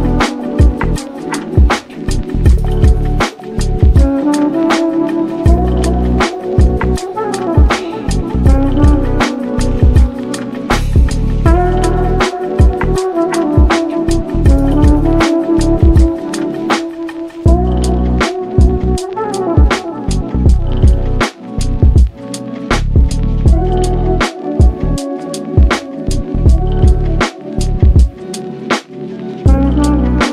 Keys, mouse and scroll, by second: 0.7 drag, 1.3-3.4 drag, 8.5-10.5 shift+right drag, 10.8 scroll up 1, 10.9 click, 11.2 middle click, 11.6-12.1 scroll up 1, 12.1 click, 12.4-12.9 scroll down 3, 12.9 click, 13.1 click, 13.5 scroll up 1, 13.6-14.3 shift+middle drag, 14.3 r, 16.1 r, 17.8 KP_3, 18.6-19.9 shift+middle drag, 19.9 g, 21.3 g, 22.2 drag, 22.5 s, 23.4 g, 25.1 ctrl+z, 26.4 g, 27.4 g, 28.7 g, 29.8 click.